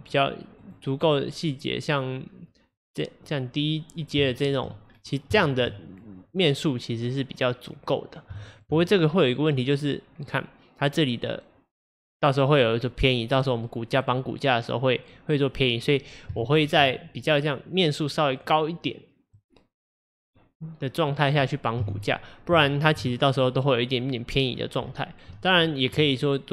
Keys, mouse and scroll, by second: 1.3-2.8 scroll down 5, 2.8-4.3 drag, 4.3-5.0 shift+middle drag, 5.0-5.4 scroll down 2, 5.4-8.7 shift+middle drag, 8.7-9.5 scroll up 4, 9.5 scroll up 3, 12.8-13.2 scroll down 3, 15.6-16.2 scroll down 5, 16.4-21.8 shift+middle drag, 21.8 KP_1, 22.7 shift+middle drag, 23.0-24.3 scroll up 7, 24.6-25.7 scroll down 9, 25.7-26.0 shift+middle drag, 26.0-26.5 scroll up 6.